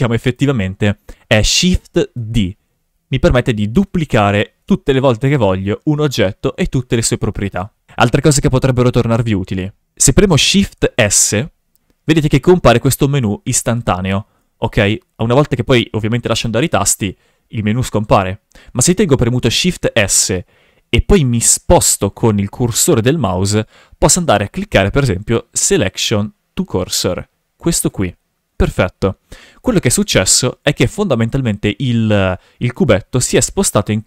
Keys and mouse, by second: 2.2 shift+d, 3.5 click, 3.9 shift+d, 4.7 shift+d, 5.3 click, 7.3 ctrl+z, 7.5 ctrl+z, 7.6 ctrl+z, 7.9 shift+g, 8.0 shift+f, 10.8 shift+s, 12.6 shift+s, 14.1 shift+s, 16.8 shift+s, 19.6 shift+s, 32.8 g, 33.7 click.